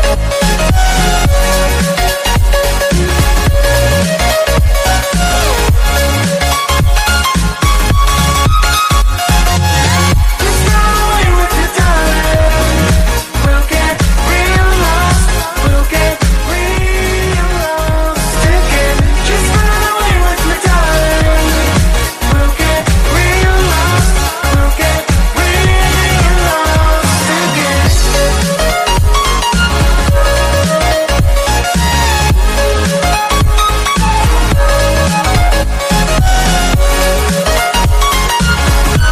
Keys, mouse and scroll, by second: 0.4 drag, 0.8-1.5 drag, 1.7-2.3 scroll down 1, 2.3 shift+d, 4.4 shift+d, 6.0 shift+d, 9.0 shift+click, 9.8 click, 10.1-10.6 scroll up 2, 10.6 g, 12.4 click, 12.7 click, 13.3 g, 15.1 click, 15.6 click, 16.0 scroll up 2, 16.2 g, 17.1-17.9 scroll up 3, 17.9 KP_Divide, 18.4 scroll down 1, 18.8 click, 19.8 click, 21.0 shift+click, 21.4 shift+click, 22.1 ctrl+j, 22.5 ctrl+j, 23.4 shift+click, 24.2 ctrl+j, 24.6 drag, 25.0 scroll up 1, 25.2 drag, 26.8 click, 27.8 drag, 28.3 click, 29.2 click, 29.6 click, 31.7 click, 32.1 scroll up 3, 32.3-33.0 scroll down 1, 34.0-36.8 drag, 37.7 click.